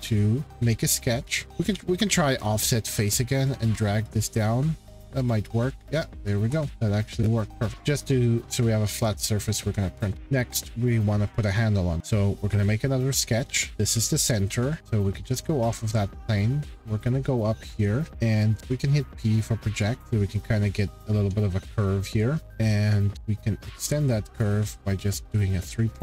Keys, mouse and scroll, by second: 0.4 click, 0.4-0.9 scroll, 1.3 click, 1.4 Escape, 1.6 scroll, 1.9 q, 2.5 click, 4.3 click, 5.3 click, 5.9 scroll, 6.7 click, 7.6 click, 7.7 scroll, 9.6 shift+middle click, 9.8 middle click, 9.9 middle click, 10.1 click, 11.1 middle click, 11.1 middle click, 12.4 shift+middle click, 14.8 middle click, 15.1 click, 17.0 scroll, 17.6-18.1 scroll, 18.6 p, 20.0 click, 20.7 click, 22.2 scroll, 23.1 click, 24.5 click, 25.5 click, 25.9-26.0 scroll.